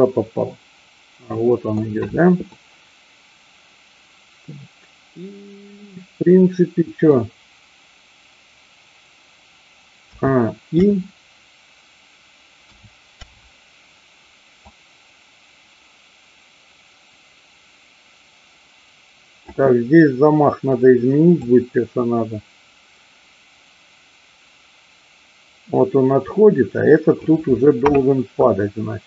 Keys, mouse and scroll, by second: 2.4-7.2 middle drag, 10.1 a, 10.7 i, 12.7 a, 13.2 i, 14.7-19.6 drag, 21.3-27.3 drag.